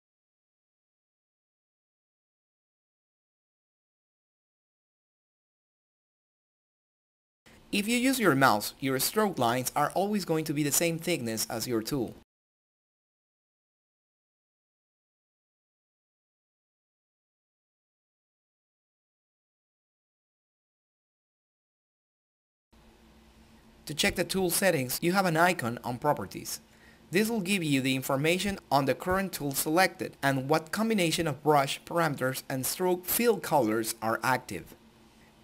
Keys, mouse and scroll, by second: 1.9-12.9 drag, 12.9 right click, 13.7 click, 14.8 ctrl+middle click, 19.2 click, 21.5 click, 22.0 ctrl+click, 22.8-23.7 typing, 24.3 click, 30.9 click.